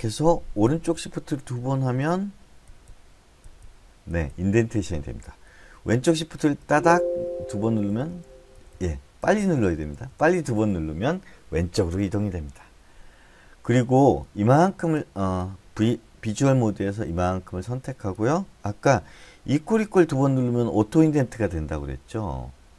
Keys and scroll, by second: 1.1 >, 1.4 >, 3.1-4.8 typing, 7.1 <, 7.2 <, 8.5-10.5 typing, 16.8 v, 20.1 =, 20.3 =.